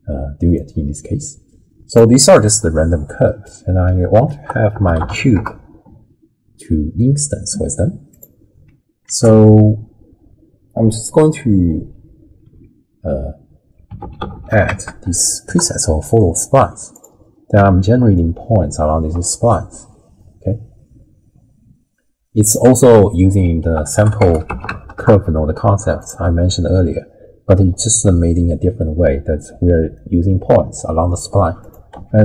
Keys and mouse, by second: 0.5-2.0 drag, 2.5-3.5 middle drag, 3.5 click, 3.5 right click, 4.3 ctrl+a, 9.1 ctrl+a, 14.3 l, 18.1-22.5 drag, 23.1 middle click, 23.6 ctrl+a, 29.9-30.7 drag, 31.9 x.